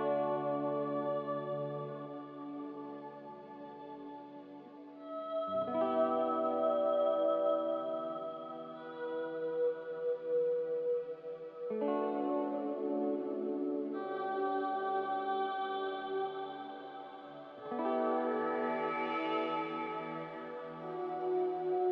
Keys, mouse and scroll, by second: 4.9-5.8 typing, 13.1-14.0 typing, 16.4-17.1 typing, 20.4 z.